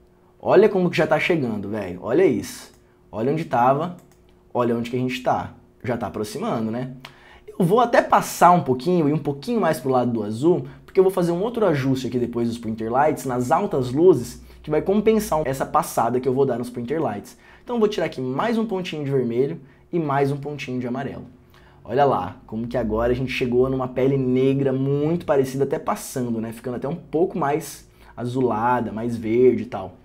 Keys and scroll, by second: 18.6 ., 20.0-20.8 typing.